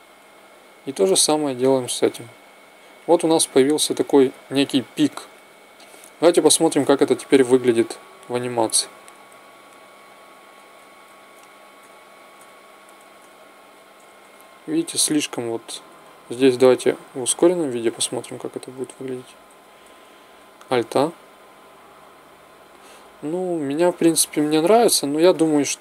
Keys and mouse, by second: 3.4-5.8 middle drag, 6.1 middle click, 7.8-10.0 Right, 10.2 Right, 10.4 Right, 10.7 Right, 10.9 Right, 11.2 Right, 11.7 Right, 12.2 Right, 12.9 Left, 13.1-13.6 Left, 13.9 Right, 14.1 Right, 14.3 Right, 14.7 Right, 15.0 Left, 15.2 Left, 16.0 Left, 16.3 Left, 16.5-17.1 Left, 17.4 Left, 17.7-18.7 Left, 19.0 Left, 19.2 Left, 19.4 Left, 19.8 Right, 20.7 alt+a, 24.0 Escape.